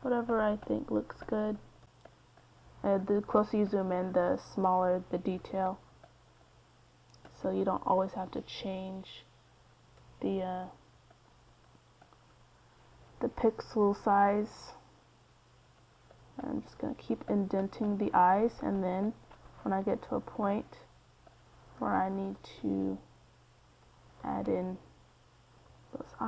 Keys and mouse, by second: 5.1 f, 9.6 middle click, 9.9-12.6 drag, 12.8 middle click, 13.2 middle click, 13.7-18.9 drag, 19.9-22.8 middle drag, 22.8-26.2 drag.